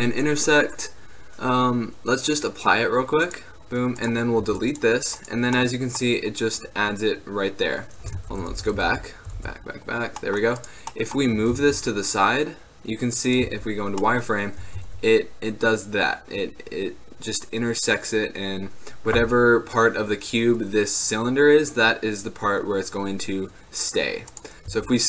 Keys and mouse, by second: 0.8-3.4 right drag, 3.4 click, 4.5 x, 5.3-7.8 middle drag, 8.3 ctrl+z, 8.6 ctrl+z, 9.0 ctrl+z, 9.5 ctrl+z, 10.3-12.9 drag, 11.5 g, 13.5 z, 14.7 g, 24.8 s.